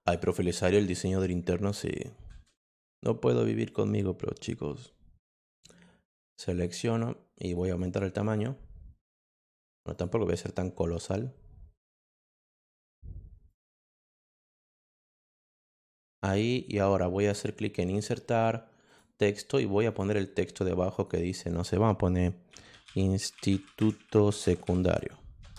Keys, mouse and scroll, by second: 0.0 click, 0.7 click, 6.2 click, 7.4 click, 7.6 click, 7.8 click, 8.2 click, 9.9 click, 10.9-12.0 drag, 13.4 click, 14.3-15.4 drag, 15.8 click, 17.2 click, 17.8 click, 18.8 click, 19.8 click, 20.9 click, 22.6-25.5 typing.